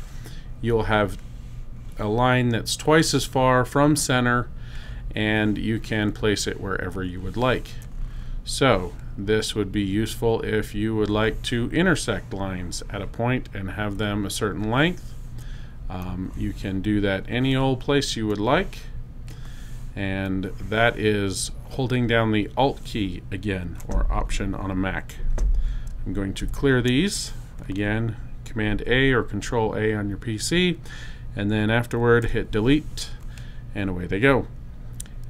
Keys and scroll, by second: 27.2 super+a, 32.1 BackSpace.